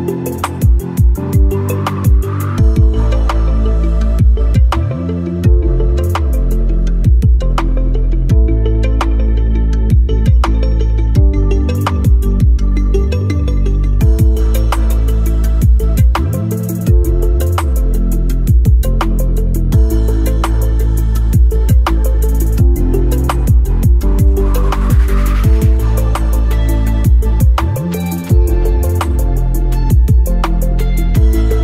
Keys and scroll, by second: 8.9 F3, 11.4 ctrl+r, 15.1 shift+F2, 15.8 F3, 18.5 F4, 19.6 ctrl+r, 23.4 ctrl+r, 27.3 ctrl+z.